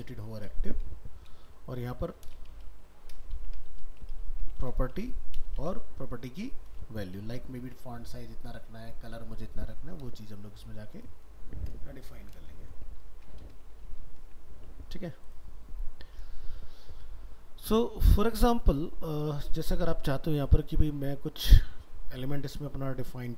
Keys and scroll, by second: 7.6 ctrl+s, 13.8 ctrl+s.